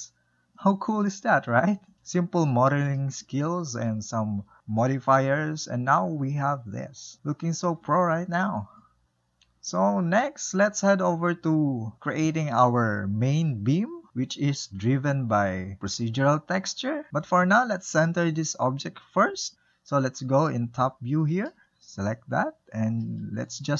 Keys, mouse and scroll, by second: 4.7-6.7 scroll down 1, 6.7-9.0 shift+middle drag, 9.6-12.7 middle drag, 12.9-13.4 scroll up 1, 13.4-15.4 shift+middle drag, 15.4-18.4 drag, 19.5 middle click, 21.1 KP_7, 21.9-22.3 scroll down 1, 22.3-22.7 drag, 22.7-23.7 scroll up 3.